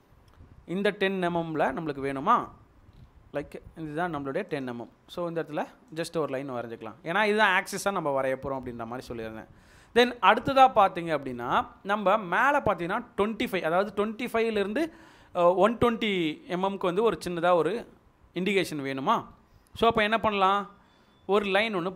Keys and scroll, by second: 6.3 Escape.